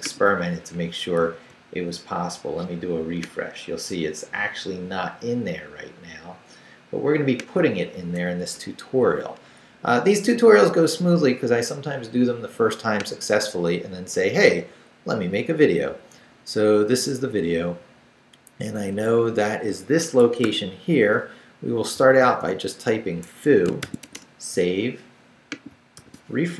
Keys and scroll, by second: 1.2 super+r, 17.8 Down, 18.4 Down, 20.0 Escape, 20.4 o, 22.0 f, 22.2 o, 23.3 Escape, 23.6-24.5 typing, 26.0 super+r.